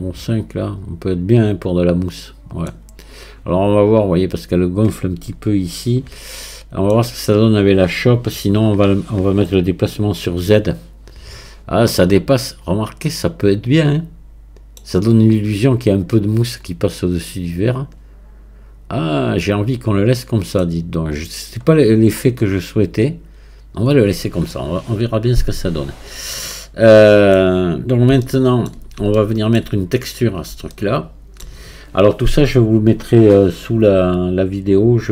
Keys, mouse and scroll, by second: 6.4-9.4 middle drag, 10.3 KP_Divide, 12.1-15.1 middle drag, 16.1-19.1 middle drag, 20.7-21.6 scroll down 1, 21.6-22.1 scroll up 1, 22.1-24.9 middle drag, 24.9-26.3 drag, 26.3-30.1 middle drag, 30.1 click, 30.7-33.7 shift+middle drag.